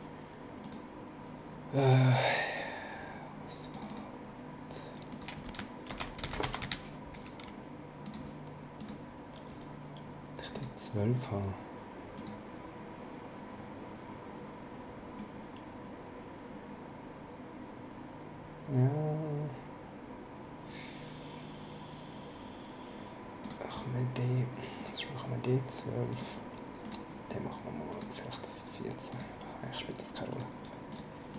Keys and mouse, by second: 0.6 click, 3.7 click, 5.1 click, 5.6-7.1 typing, 8.0 click, 10.5 click, 12.1 click, 23.4 click, 24.8 click, 26.1 click, 27.9 click, 29.1 click, 30.3 click.